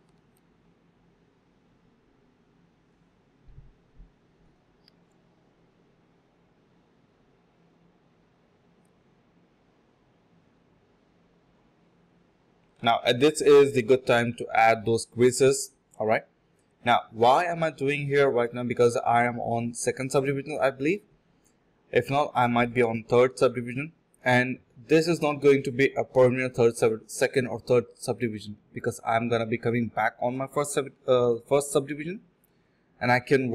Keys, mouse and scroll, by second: 0.2 ctrl+shift+z, 0.4-1.1 typing, 1.4 double click, 2.1 shift+click, 2.1 shift+double click, 2.2 shift+click, 7.7 double click, 8.3 double click, 8.3 shift+click, 8.4 shift+double click, 8.6 shift+click, 9.3 alt+click, 10.3 alt+click, 10.7 ctrl+b, 11.0 double click, 14.9 shift+click, 16.0 double click, 17.1 shift+click, 17.1 shift+double click, 17.2 shift+click, 17.8 alt+click, 18.1 alt+click, 18.2 alt+click, 19.1 alt+click, 19.3 ctrl+b, 19.9-20.7 typing, 22.1 typing, 23.5 alt+click, 23.7 alt+click, 24.5 alt+click, 25.3 typing, 25.6 ctrl+b, 26.3 alt+click, 26.7-27.0 typing, 27.0 alt+click, 27.1 alt+double click, 27.2 alt+click, 27.9 double click, 28.2 ctrl+z, 28.3 ctrl+z, 28.7 ctrl+z, 28.8 x, 29.5 double click, 30.8 shift+click, 30.9 shift+double click, 31.1 shift+click, 31.8 alt+click, 32.0 alt+click.